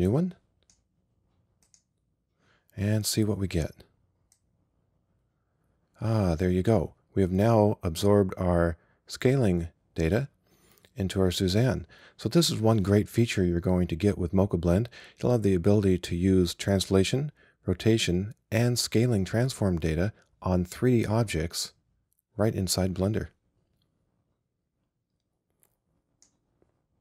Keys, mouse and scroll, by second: 1.8-4.0 drag, 4.4-6.2 drag.